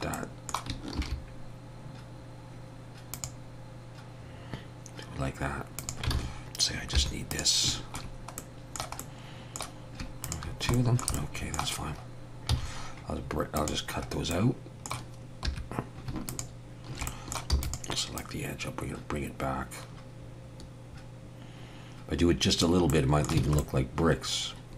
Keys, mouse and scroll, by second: 0.1 middle click, 1.0 ctrl+r, 6.1 alt+a, 7.0 3, 7.3 click, 8.4 middle click, 9.0 middle click, 10.2 shift+click, 10.7 shift+middle click, 10.8 shift+middle click, 11.1 middle click, 12.5 x, 14.1 scroll up 2, 14.3 middle click, 15.5 2, 16.3 alt+shift+click, 17.1 middle click, 17.5 e, 18.2 click, 22.9 middle click, 23.4 alt+a, 23.6 middle click.